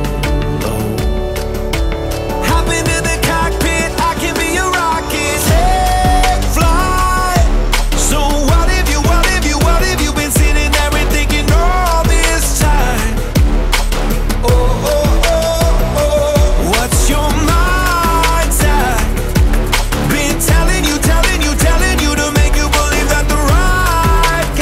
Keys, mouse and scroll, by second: 2.2-11.9 drag, 11.9-12.7 scroll down 1, 12.7-14.0 drag, 14.3 click, 15.2-15.6 scroll down 2, 15.6-16.3 middle drag, 16.3 shift+a, 21.0 middle click, 21.5-22.0 scroll up 4, 22.4-24.6 shift+middle drag.